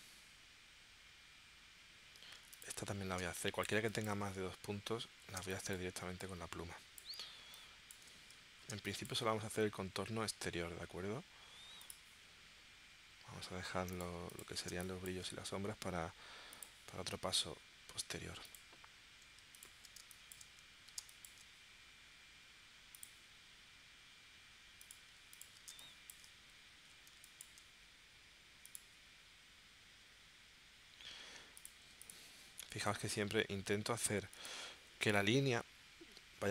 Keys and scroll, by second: 3.2 space, 5.4 space, 8.7 space, 14.7 space, 20.0 space, 21.0 space, 25.7 space, 27.2 space.